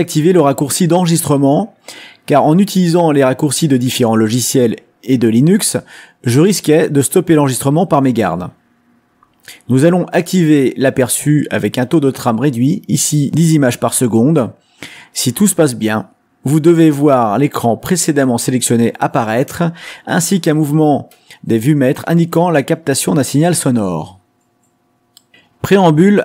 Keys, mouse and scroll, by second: 0.4 click, 1.4 click, 2.1 click, 2.6 click, 10.5 click, 13.3 click, 16.6-19.3 drag.